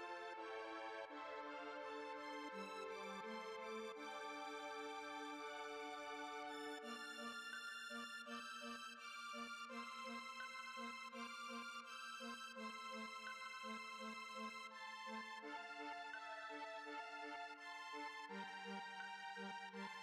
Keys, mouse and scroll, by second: 0.9 F3, 1.1 Tab, 1.6 Tab, 2.0 click, 3.2 click, 3.6 space, 3.8 middle click, 4.1 space, 4.3 space, 4.6 click, 5.5 shift+middle click, 6.3 scroll down 1, 6.5-11.5 middle drag, 11.5 space, 11.7-20.0 middle drag.